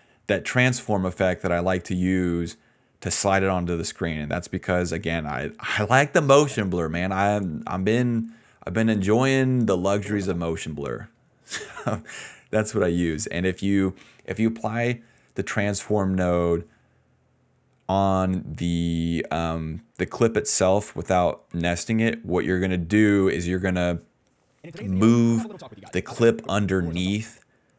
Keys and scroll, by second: 6.1 space, 6.6 space, 7.1 space, 7.4 space, 9.8 space, 10.2 space, 10.4 d, 13.8 a, 14.7 s, 14.8 s, 24.5 space, 25.0 d, 26.4 space, 26.6 space, 27.2 space.